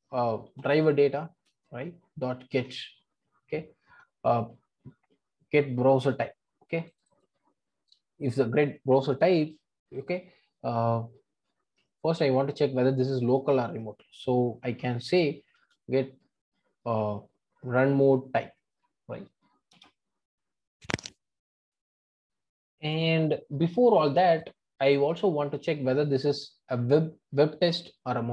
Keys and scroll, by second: 1.3 Return.